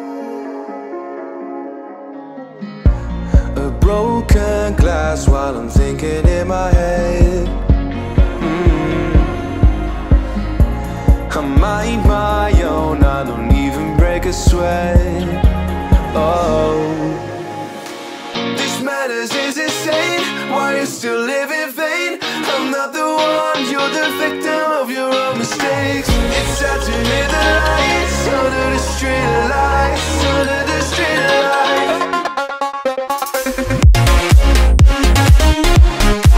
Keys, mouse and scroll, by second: 0.0 middle click, 0.1 scroll down 2, 0.3-2.3 middle drag, 2.3 click, 2.7-5.7 middle drag, 5.9-6.5 scroll up 2, 6.5 middle click, 7.4 click, 8.5 scroll down 2, 8.8-10.3 middle drag, 10.3 click, 10.7 middle click, 11.2-12.4 scroll up 3, 12.4 click, 13.1-13.5 scroll up 2, 13.5-13.9 scroll down 1, 13.9-17.5 middle drag, 17.5 click, 22.3 alt+m, 23.8 ctrl+z, 26.4 alt+m, 26.8-27.9 middle drag, 27.9-28.3 scroll down 3, 28.3-31.6 middle drag, 31.6 shift+click, 34.6 alt+m, 35.1-36.2 middle drag, 36.2-36.3 scroll up 2.